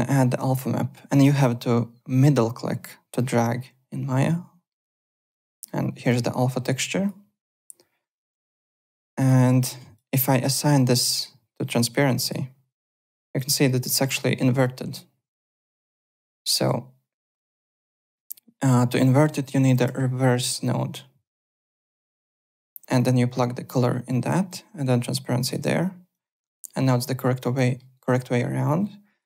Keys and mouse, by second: 3.2 middle click, 5.2 click, 5.4 alt+middle click, 6.0 click, 8.5 click, 9.2 click, 11.0 click, 13.2 click, 14.2 alt+middle click, 14.4 alt+right click, 14.6 alt+click, 15.4 alt+middle click, 16.1 click, 19.3 click, 19.4-20.3 typing, 20.9 middle click, 22.2 click, 22.9 click, 24.4 click, 26.1 click, 27.5 alt+middle click, 27.9 alt+right click, 28.6 click.